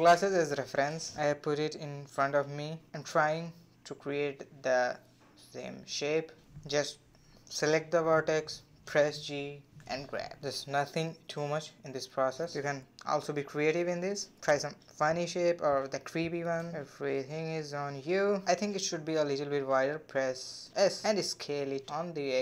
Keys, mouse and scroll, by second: 0.6 click, 0.7 g, 1.3 click, 2.0 g, 3.0 click, 3.2 g, 4.6 click, 4.7 g, 5.9 click, 6.2 shift+click, 6.5-12.0 typing, 6.9 click, 7.2 click, 8.2 click, 9.2 click, 9.9 click, 10.7 click, 11.5 click, 14.9 a, 15.5 g, 17.9 click, 18.6 g, 20.0 a, 20.2 s, 21.4 g.